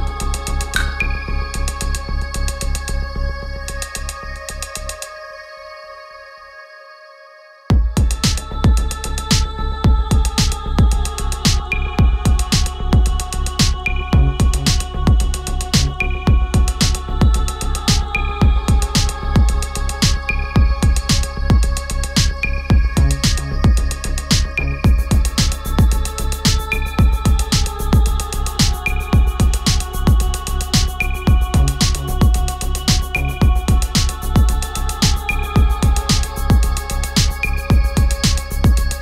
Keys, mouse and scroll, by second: 5.6 click, 8.6-14.1 drag, 17.4-23.0 drag, 24.6-25.9 drag, 29.9 click, 32.5 click, 34.7-39.0 drag.